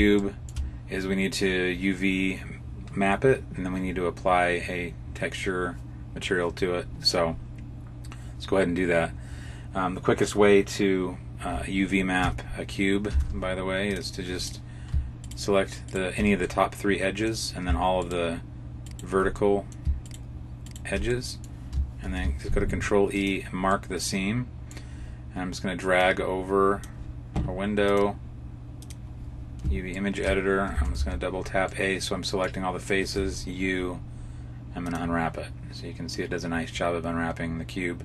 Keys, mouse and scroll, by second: 0.1 shift+middle click, 12.1 Tab, 13.0 ctrl+Tab, 14.2 right click, 15.1 shift+right click, 15.7 right click, 16.3 middle click, 17.9 shift+right click, 18.7 shift+right click, 19.3 middle click, 19.9 shift+right click, 20.5 shift+right click, 21.0 middle click, 22.0 ctrl+e, 23.6 middle click, 25.9 click, 27.7 click, 29.9 shift+middle click, 30.6 a, 30.8 a, 31.6 middle click, 33.0 u.